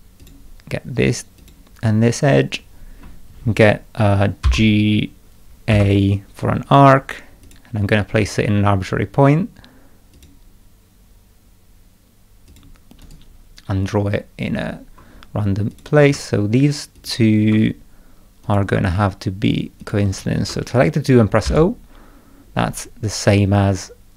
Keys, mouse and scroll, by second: 0.2 click, 1.4 click, 4.4 g, 5.7 a, 7.4 click, 10.1 click, 12.5 click, 13.0 right click, 13.8 scroll up 1, 15.7 click, 16.9 ctrl+click, 18.4 click, 19.8 ctrl+click, 21.4 o, 23.5-24.1 drag.